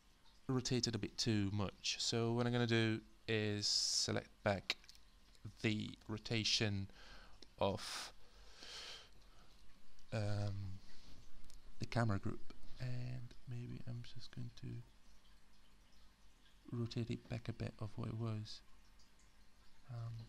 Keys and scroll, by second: 0.8 space, 6.0 e.